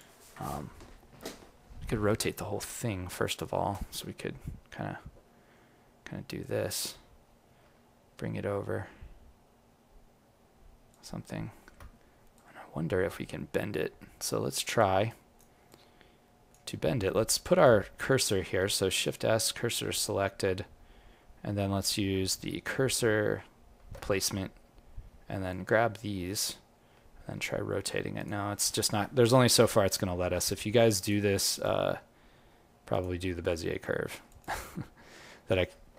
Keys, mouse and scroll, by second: 0.5-1.7 scroll up 3, 1.7-2.0 scroll down 3, 2.0 right click, 3.2 click, 4.3 r, 11.5 alt+middle click, 12.3 click, 15.0 click, 15.0 right click, 15.6 click, 17.0-17.5 scroll up 2, 17.5 click, 18.5 shift+s, 28.7 alt+middle click, 29.2 click, 30.3 g, 31.4 click, 31.8 g, 35.5 ctrl+z.